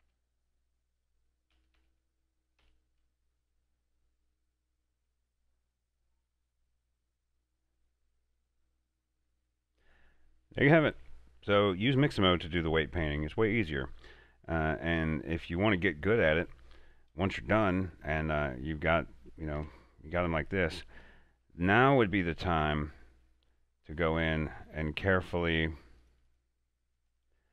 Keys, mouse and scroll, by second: 0.9 right click, 1.5 a, 2.6 typing, 3.5-5.2 middle drag, 5.2 scroll down 1, 5.6-11.7 middle drag, 17.9 middle click, 17.9-19.5 middle drag, 19.5 Tab, 20.2 middle click, 20.7-21.0 scroll up 2, 21.1 shift+middle click, 21.6-21.9 scroll up 2, 22.1 shift+middle click, 22.5 scroll down 2, 23.2 middle click, 24.0 right click, 24.4 r, 25.0 right click, 26.0 click.